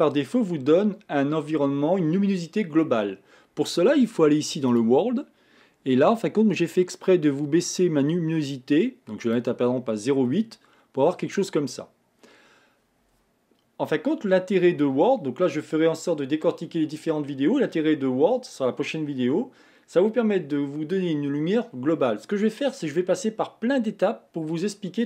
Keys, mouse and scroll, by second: 4.9 click, 6.2-9.3 drag, 9.8 scroll down 2, 10.3-11.7 middle drag, 11.7 scroll up 2.